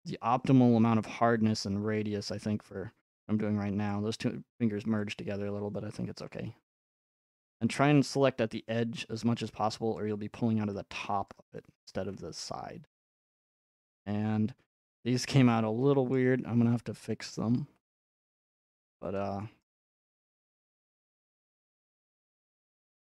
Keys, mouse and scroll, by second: 3.9-8.0 drag, 10.0 click, 11.3 click, 13.0 middle click, 16.1 middle click, 17.6 g, 18.9 click, 19.2-21.4 middle drag, 21.4-22.6 ctrl+drag.